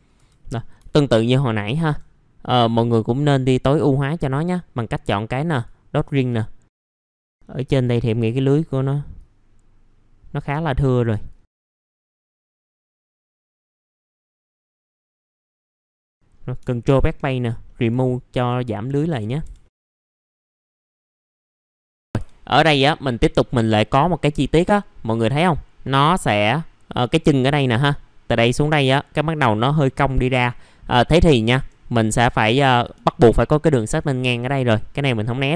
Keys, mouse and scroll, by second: 0.1 F4, 0.4 middle click, 0.8 alt+middle click, 1.2 scroll up 1, 1.8-2.4 scroll up 1, 2.4 click, 6.7 scroll up 1, 6.9 middle click, 7.1 alt+click, 8.0 middle click, 9.1 alt+click, 10.6 middle click, 11.3 alt+click, 12.2 alt+click, 12.5 middle click, 12.6 scroll up 1, 12.8 alt+click, 13.0 scroll down 1, 13.2 middle click, 13.4-13.7 scroll up 1, 13.7 middle click, 13.7 scroll down 1, 13.9 alt+click, 14.3 middle click, 14.6 alt+click, 15.0 alt+click, 15.2-15.5 scroll down 2, 15.3 middle click, 15.7 middle click, 16.0-16.6 scroll up 1, 16.8 BackSpace, 17.6 middle click, 17.7 scroll down 1, 18.0 alt+middle click, 18.7 scroll up 1, 18.8 F4, 19.6 middle click, 19.6 scroll down 1, 20.3 scroll down 1, 20.5 scroll up 1, 20.8 middle click, 21.5 scroll up 1, 21.7 click, 21.9 middle click, 23.2 scroll down 1, 24.3 middle click, 30.3-30.7 scroll up 1, 30.7 middle click, 32.1 click, 32.8 F4.